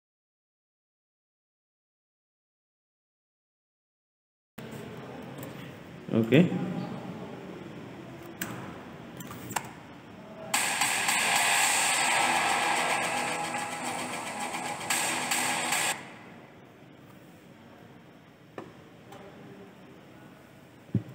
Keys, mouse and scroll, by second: 0.0-3.7 typing, 0.1 click, 1.1 click, 2.0 click, 2.8 click, 3.6 click, 4.4 middle click, 5.1 ctrl+s, 6.2 click, 7.3 scroll up 5, 8.5 shift+middle click, 9.4 space, 15.7 space.